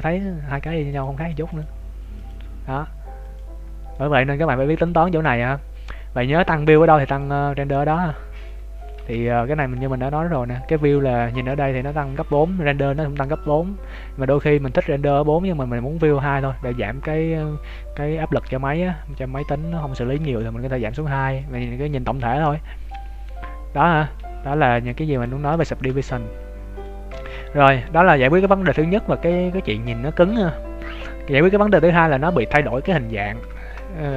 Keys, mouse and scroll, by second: 3.6-3.9 scroll up 2, 3.9 middle click, 6.7 click, 7.2 click, 7.9 middle click, 9.0 ctrl+s, 11.4 middle click, 14.2 click, 16.2 middle click, 19.7 middle click, 22.7 scroll down 1, 23.3 scroll down 2, 23.5 scroll up 2, 24.7 click, 25.6 shift+middle click, 26.0 middle click, 27.0 Tab, 32.1-32.7 scroll down 1, 32.7 middle click, 32.7 scroll down 1, 33.5 shift+middle click.